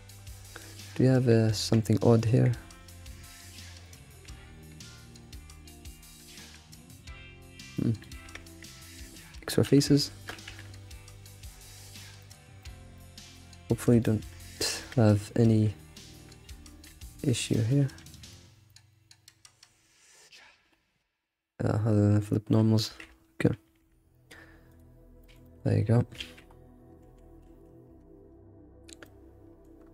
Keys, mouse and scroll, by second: 0.1 scroll up 4, 0.4-1.6 middle drag, 1.6 Tab, 2.1 click, 2.3 g, 3.8 click, 4.2 g, 5.3-6.5 middle drag, 6.5 g, 8.2 Tab, 8.5 click, 8.8 shift+click, 9.6 Delete, 10.5 a, 10.8 ctrl+shift+w, 11.8-12.2 scroll down 6, 12.2-13.4 middle drag, 13.4-13.7 scroll up 4, 13.7-14.8 middle drag, 14.8 Tab, 15.6 3, 16.9 ctrl+z, 17.4 scroll down 1, 17.6-18.2 middle drag, 18.2 Tab, 18.4-18.7 scroll down 4, 18.7 middle click, 19.5 3, 20.1-22.9 middle drag, 22.9 a, 23.6 shift+n, 24.7 click, 25.2 alt+middle click, 25.4 alt+middle click, 26.2 alt+shift+z, 26.4 scroll up 4, 27.0 ctrl+s, 27.2 scroll down 4, 27.4 alt+shift+z, 29.0 middle click, 29.8 scroll up 1.